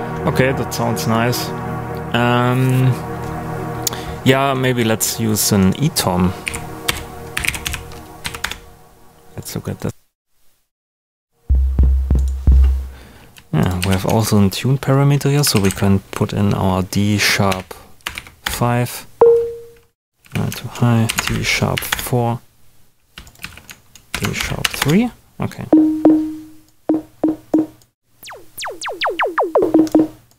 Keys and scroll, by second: 6.2-8.1 typing, 8.2 Down, 8.4 Return, 13.7 super+a, 15.3-18.1 typing, 18.4 Return, 20.2 super+a, 21.0 shift+super+d, 21.2 shift+#, 21.7 4, 21.9 Return, 23.4 super+a, 24.1 shift+super+d, 24.3 shift+3, 24.7 Return.